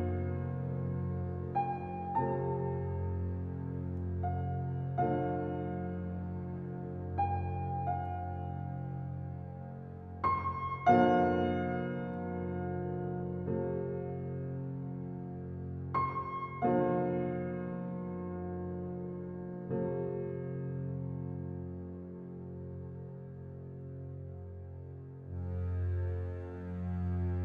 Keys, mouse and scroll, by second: 1.3 middle click, 2.0 Tab, 2.4 click, 3.2 scroll down 1, 3.4-4.6 middle drag, 4.6-7.0 drag, 8.0 click, 10.5-11.1 drag, 13.5 click, 15.3 click, 23.9 KP_0, 24.5-24.8 middle drag, 24.8-25.2 scroll up 3, 25.2-27.4 middle drag.